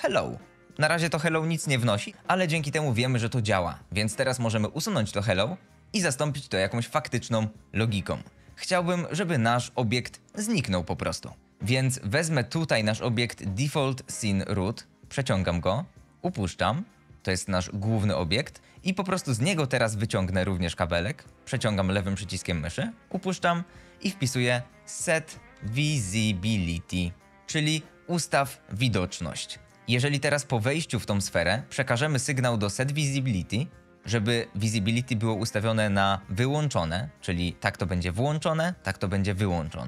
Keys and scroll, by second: 4.7 Delete, 24.6-26.3 typing, 27.3 Return.